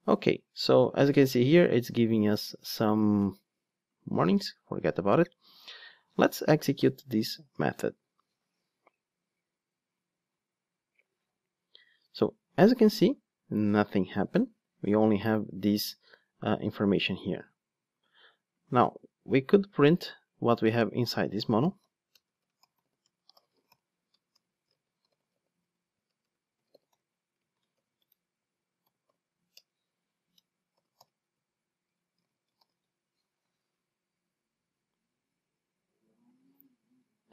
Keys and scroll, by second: 7.7 ctrl+shift+d, 19.5 Tab, 29.5 Return, 30.9 alt+super+l, 32.6 ctrl+d.